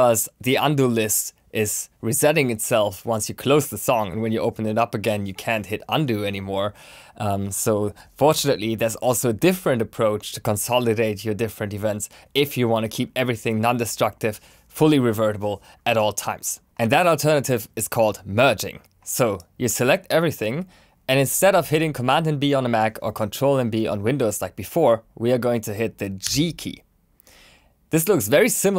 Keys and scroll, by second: 26.2 g.